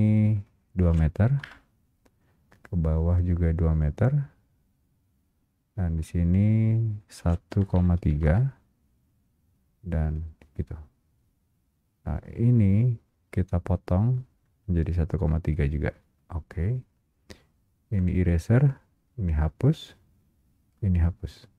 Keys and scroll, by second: 1.5 Return, 8.3 Return.